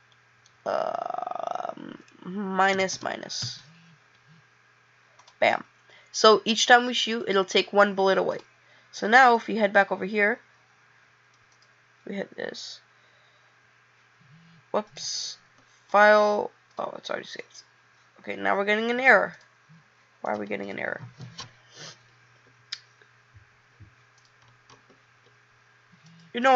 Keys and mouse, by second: 16.7 click.